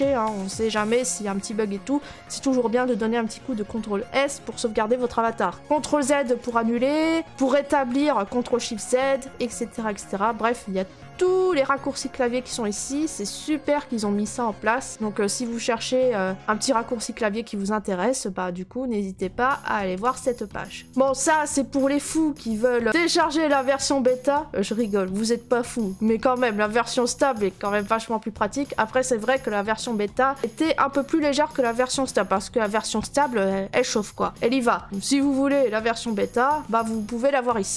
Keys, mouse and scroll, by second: 6.2 click, 6.4 click, 6.7 middle click, 6.7 middle click, 6.8 middle click, 7.2 middle click, 8.5 click, 9.7-10.6 scroll, 11.2 scroll, 11.9-12.6 scroll, 13.2 middle click, 13.2 scroll, 14.2 scroll, 16.3 scroll, 17.4 scroll, 18.1 middle click, 20.0 right click, 20.0 scroll.